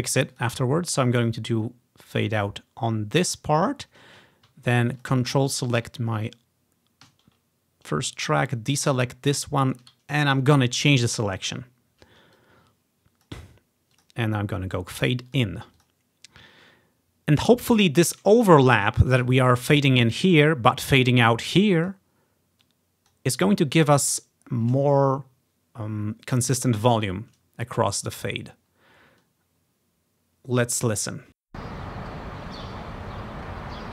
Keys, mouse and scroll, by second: 0.4-3.6 drag, 5.0-6.3 ctrl+drag, 8.6 ctrl+click, 9.9 ctrl+click, 10.4-11.6 drag, 12.4 click, 14.0 click, 16.2-17.5 drag, 21.2 click, 22.7 click, 24.1 click, 31.4 space.